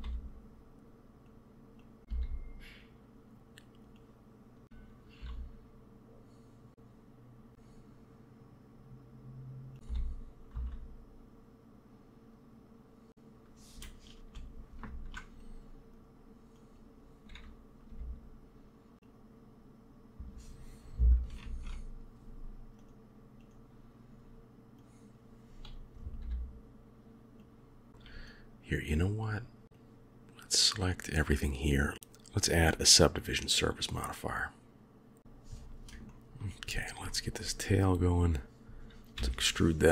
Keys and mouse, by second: 1.8 click, 2.0 g, 4.0 click, 5.1-7.5 drag, 5.1 e, 7.5 s, 9.8 g, 14.7 ctrl+r, 16.4 click, 17.8 g, 21.3 ctrl+r, 24.8 click, 26.1 g, 27.9 shift+KP_3, 29.7-30.4 drag, 31.9-35.2 drag, 35.9 shift+middle click, 36.9 shift+middle click, 37.6 click, 39.1 e.